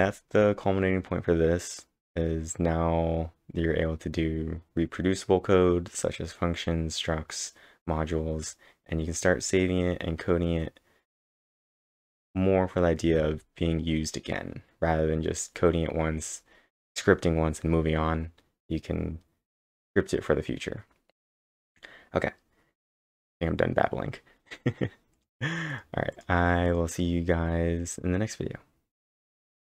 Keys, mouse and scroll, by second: 25.1 click, 25.7 click, 26.1 click, 26.7 click, 28.7-29.7 typing.